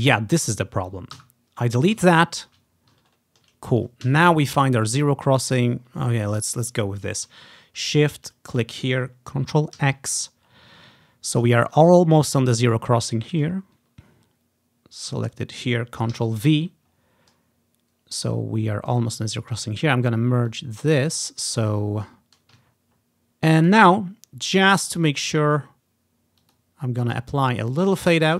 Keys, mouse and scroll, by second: 1.3 Delete, 2.3 ctrl+scroll down 1, 3.2 ctrl+scroll down 1, 3.9 click, 4.2 z, 4.5-5.4 ctrl+scroll up 1, 5.9-6.8 ctrl+scroll down 1, 8.4-9.7 shift+drag, 9.9 ctrl+x, 10.7-11.6 ctrl+scroll up 1, 12.0 ctrl+scroll down 1, 13.7 scroll up 1, 14.2 scroll up 1, 15.4 click, 16.2 ctrl+v, 17.0 ctrl+scroll down 1, 18.3 click, 20.6 click, 21.1 ctrl+scroll up 1, 21.7 ctrl+scroll down 2, 22.8 ctrl+scroll up 1, 24.7 click, 25.5-26.5 drag, 26.6 click, 28.0 click.